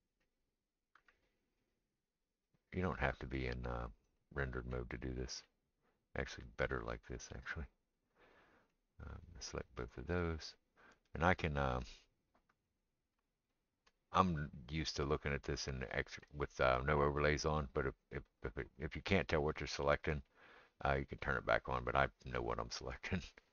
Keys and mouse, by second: 0.0-8.1 right drag, 0.9 g, 3.0 click, 3.0 middle click, 4.8-7.4 middle drag, 8.1-8.7 middle drag, 8.7-23.5 right drag, 9.2 click, 11.3 click, 11.3 middle click, 11.8-12.8 drag, 11.8-12.8 middle drag, 14.7 click, 14.7 middle click, 21.2 click, 21.2 middle click.